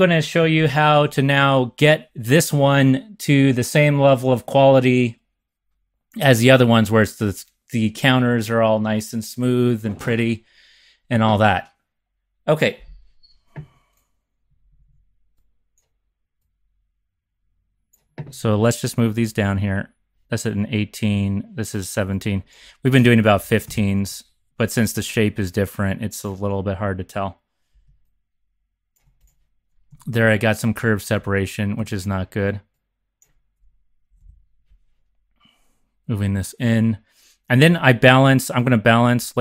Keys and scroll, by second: 0.6 r, 14.5 z, 14.9 z, 23.3 Up, 23.4 Left, 23.6 Left, 24.0 Left, 29.8 x, 31.2 z, 31.7 x, 34.1 Left, 34.2 Left, 37.7 z.